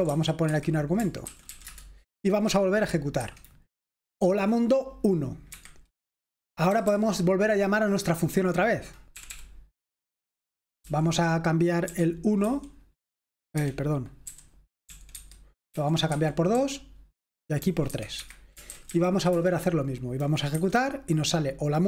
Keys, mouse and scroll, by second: 0.0-2.0 typing, 3.3 F5, 5.5 Escape, 6.6 typing, 8.9-9.7 typing, 11.0-12.4 typing, 13.5 Escape, 14.2-19.8 typing, 20.6 F5.